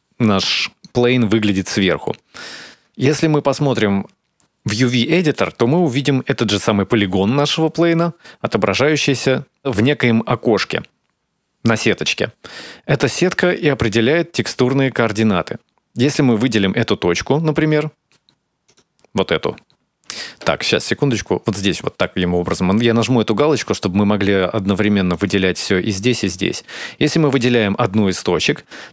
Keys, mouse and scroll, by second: 0.2 scroll up 2, 1.0-1.3 scroll up 1, 4.0 click, 7.8 a, 10.8 a, 14.2 click, 15.1-16.5 scroll down 1, 17.2 right click, 19.7 right click, 22.2 click, 26.3 right click, 27.2 right click, 28.5 right click.